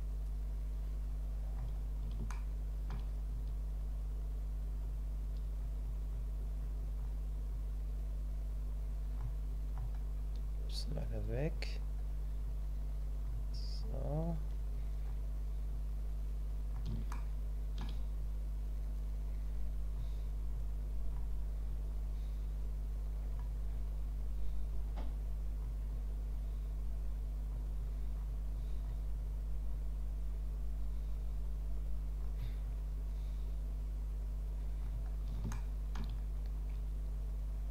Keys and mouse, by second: 2.4 shift+middle click, 17.1 shift+middle click, 18.6-35.5 drag, 35.5 shift+middle click.